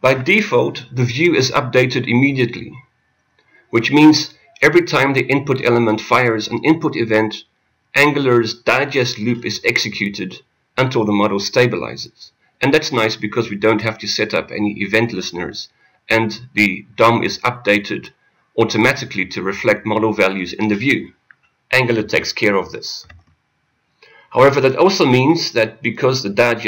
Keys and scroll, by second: 17.2 Return.